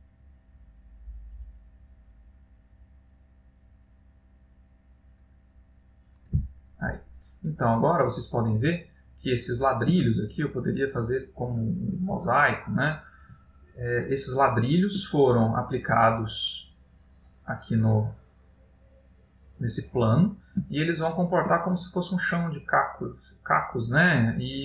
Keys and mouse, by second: 8.0 middle click, 10.4 ctrl+middle click, 12.4 middle click, 13.8 ctrl+middle click, 15.6 middle click, 20.9 ctrl+middle click, 23.1 middle click.